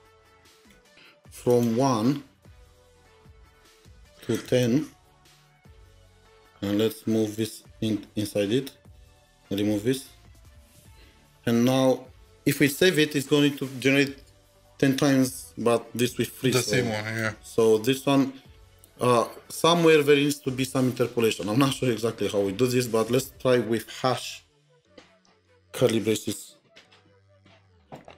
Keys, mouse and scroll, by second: 0.7-1.0 typing, 1.5 double click, 3.5 1, 4.5 double click, 5.3-6.1 typing, 8.3 alt+Up, 8.4 alt+Up, 8.6 alt+Up, 10.3 BackSpace, 10.4 BackSpace, 27.1 BackSpace.